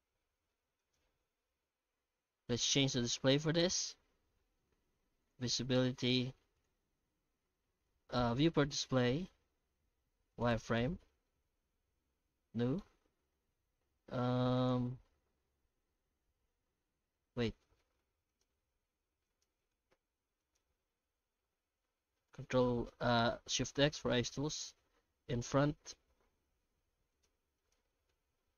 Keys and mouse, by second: 0.0 alt+h, 0.3 middle click, 0.8 right click, 2.9 click, 5.2 click, 8.3 click, 10.3 click, 11.3-12.8 middle drag, 14.5 click, 18.3-19.4 right drag, 19.7 h, 20.4 right click, 20.7 Tab, 21.2 Tab, 22.4 ctrl+shift+x, 26.2 alt+h, 26.7 alt+a, 27.1 right click, 27.6 right click, 28.1-28.5 alt+middle drag.